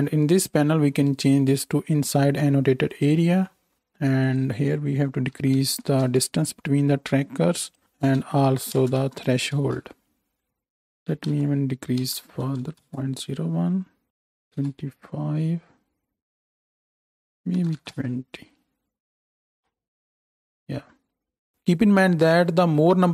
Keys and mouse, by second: 1.1-17.0 middle drag, 17.0-23.1 drag.